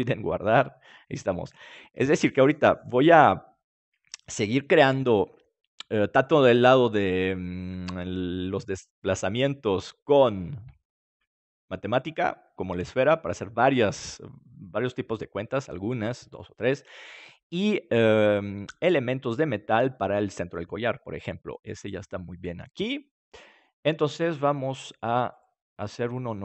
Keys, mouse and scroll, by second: 25.3-26.4 right drag.